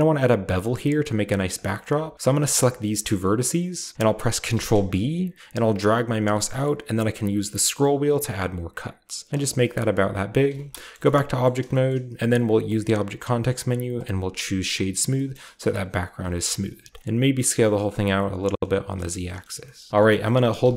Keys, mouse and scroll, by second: 1.5-3.5 right drag, 4.5 ctrl+b, 7.0-8.0 scroll up 8, 9.3 click, 9.5-10.8 middle drag, 10.5 Tab, 10.9 shift+middle click, 11.0-11.9 scroll down 1, 11.0 shift+middle drag, 11.4 shift+middle drag, 11.9-13.9 shift+middle drag, 11.9-13.9 shift+scroll up 1, 12.6 w, 13.9 click, 14.9 middle drag, 14.9-16.1 scroll down 1, 15.1-16.1 shift+middle drag, 15.7 Tab, 16.2-16.8 typing, 18.5 click, 18.7 Tab, 19.4 typing, 19.9 ctrl+b, 20.5-20.7 typing.